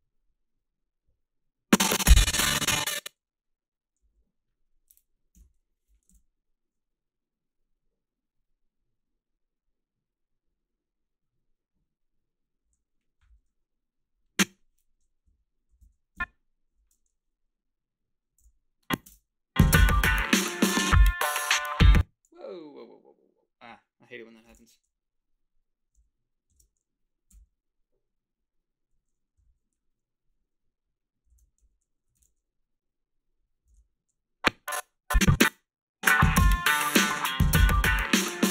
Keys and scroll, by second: 3.3 h, 5.4 Home, 15.3 Up, 15.7 i, 15.8 Down, 16.1 Left, 16.7 o, 18.2-19.8 typing, 21.7 space, 21.9 h, 24.5 shift+x, 26.5 shift+x, 31.3 ctrl+r, 32.2 ctrl+z, 33.7 ctrl+r, 35.5 space.